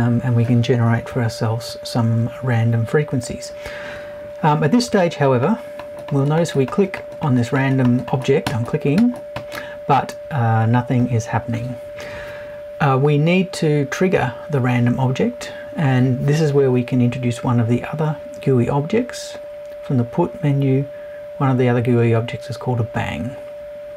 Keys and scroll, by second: 1.1 Left.